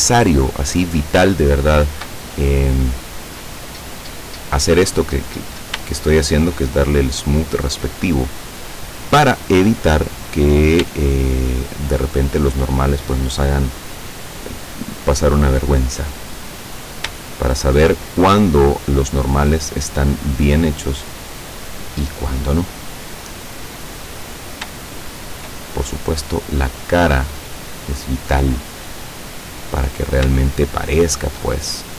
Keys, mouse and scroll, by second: 0.3-0.6 scroll up 2, 1.4 shift+middle click, 2.2 shift+right click, 4.0 click, 5.5 scroll down 1, 6.0 shift+middle click, 7.3 right click, 8.5 click, 11.1 shift+middle click, 12.0 shift+middle click, 12.6 shift+right click, 14.3 click, 15.5 right click, 16.6 click, 17.3 shift+middle click, 18.3 shift+right click, 19.5 click, 20.9 right click, 21.8 click, 23.0 right click, 24.2 click, 24.9 shift+middle click, 26.0 shift+click, 27.6 click, 29.3-30.0 scroll up 2, 30.5-31.6 shift+middle drag, 31.8 shift+right click.